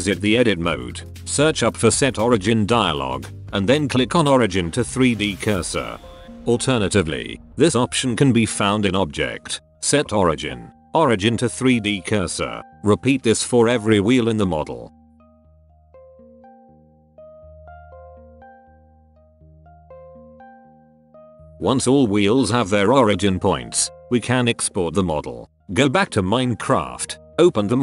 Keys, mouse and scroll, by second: 2.4-2.8 middle drag, 3.6 Tab, 3.9 a, 4.0 a, 4.5 a, 4.7 shift+s, 5.9-6.5 middle drag, 8.3 space, 10.7 Escape, 10.9 Tab, 11.3-12.6 typing, 11.8 drag, 12.1 Tab, 13.0 Tab, 13.9 space, 14.5 drag, 14.9 Tab, 15.0 a, 15.0 a, 15.1 a, 15.3 shift+s, 15.9 Tab, 16.3 space, 17.3 middle drag, 17.5 click, 17.7 middle drag, 17.9 middle drag, 18.4-18.8 middle drag, 18.9 middle drag, 19.1 middle click, 19.3 click, 19.3 middle drag, 19.5 drag, 19.6 middle click, 19.8 click, 19.9 middle click, 20.1 middle drag, 20.6 click, 21.0-21.8 middle drag, 21.9 right click, 22.2 right click, 22.5-23.0 middle drag, 23.2 right click, 23.3-24.3 middle drag.